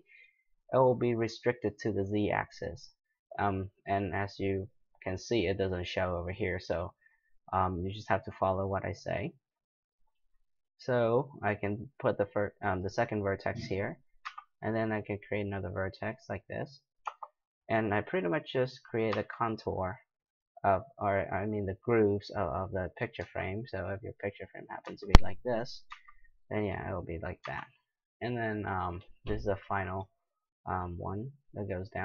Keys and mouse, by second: 14.2 e, 17.0 d, 19.1 e, 23.2 e, 24.8 e, 25.9 e, 27.4 e.